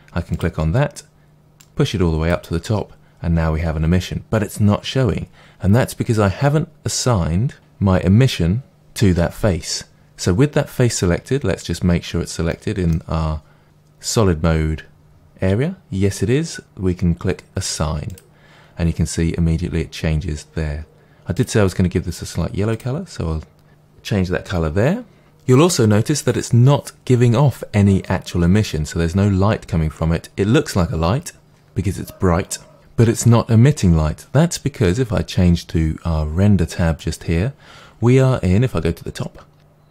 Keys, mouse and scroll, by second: 12.5-18.1 middle drag, 13.1-14.3 scroll up 3, 14.3-16.5 scroll up 1, 18.1-22.7 drag, 37.0 click, 38.1-39.3 scroll up 1.